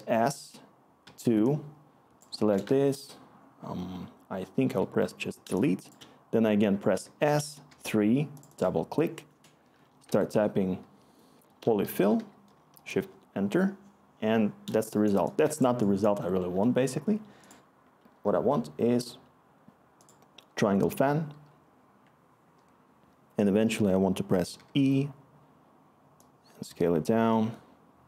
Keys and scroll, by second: 1.0 typing, 4.6 Delete, 7.0-7.6 typing, 10.0 Tab, 11.1-12.6 typing, 12.9 Return, 15.2-15.9 scroll, 24.5 e.